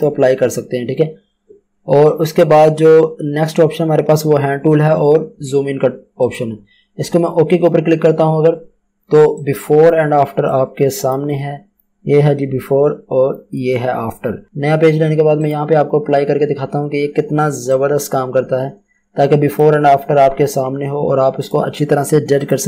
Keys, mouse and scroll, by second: 14.4 Return, 15.4 click, 20.2 scroll down 1, 21.4 right click, 22.3 click.